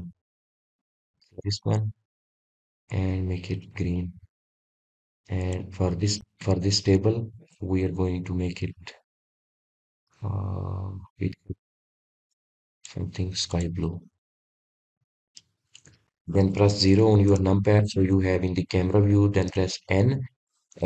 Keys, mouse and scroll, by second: 8.2 click, 9.3 click, 10.9-13.7 drag, 14.4 click, 16.2 shift+click, 17.3-20.7 drag.